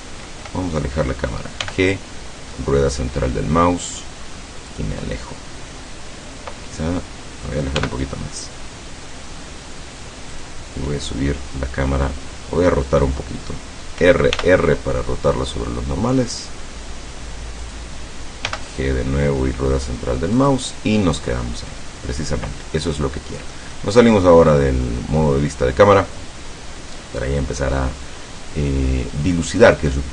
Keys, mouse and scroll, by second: 1.7 g, 2.5 middle click, 4.8 click, 7.8 g, 8.1 middle click, 10.3 click, 14.0 r, 17.7 click, 18.5 g, 18.7 middle click, 20.4 click, 21.7-22.1 scroll up 2, 22.2 scroll down 2, 22.8 middle click, 23.6 click, 24.1-24.6 scroll up 2, 24.6-25.1 scroll down 4.